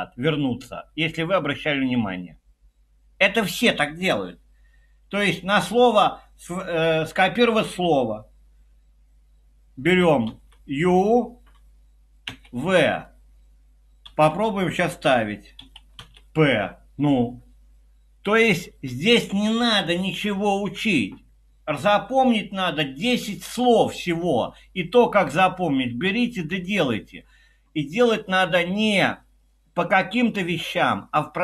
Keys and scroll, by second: 5.4 typing, 10.3 typing, 12.3 typing, 14.0 typing, 15.6 Escape, 15.7-16.5 typing.